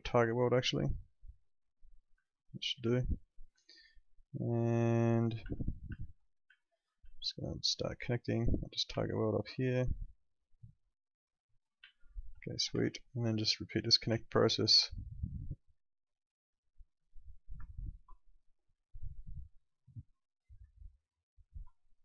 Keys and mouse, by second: 2.2 alt+middle click, 3.6 alt+middle click, 4.8 alt+middle click, 5.5 middle click, 5.9 alt+middle click, 6.5 alt+middle click, 7.2 alt+middle click, 9.0 alt+middle click, 10.4 click, 11.9 alt+middle click, 12.7 w, 13.8 click, 14.5 ctrl+click, 17.8 ctrl+click, 21.4 ctrl+click.